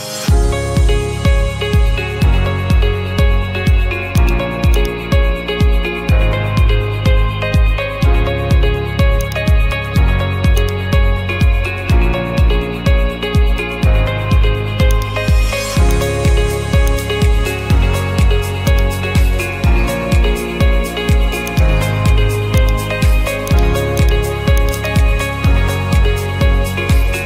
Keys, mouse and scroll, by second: 2.4 middle click, 4.3 click, 5.0 click, 5.6-7.1 typing, 9.3-11.9 drag, 12.7-14.9 middle drag, 15.0-16.1 drag, 16.9 click, 18.8 click, 21.6 click, 24.3 click, 24.7 click, 26.0-27.0 typing, 26.3 click, 27.1 Return.